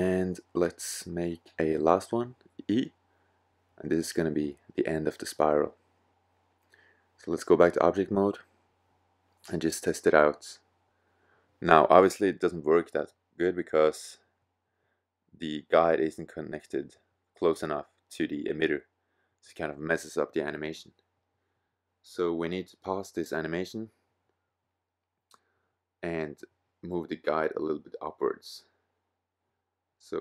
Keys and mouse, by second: 0.3 e, 2.3 click, 8.3 middle click, 10.3-11.5 middle drag, 12.6-14.2 middle drag, 14.5 middle click, 17.5 middle click, 24.2-26.2 middle drag, 26.8-29.9 middle drag, 30.1-30.2 drag.